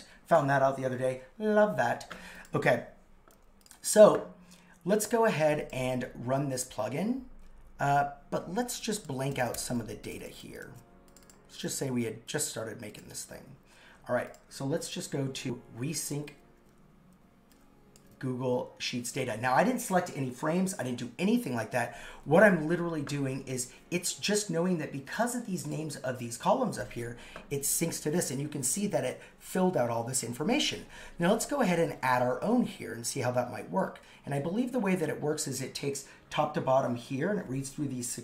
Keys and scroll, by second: 10.4 super+s.